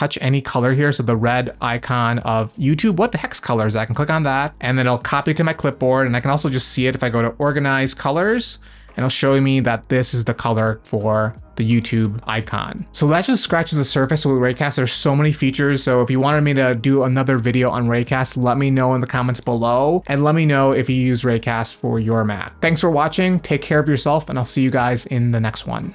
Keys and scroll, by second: 6.1 super+space, 8.4 Return.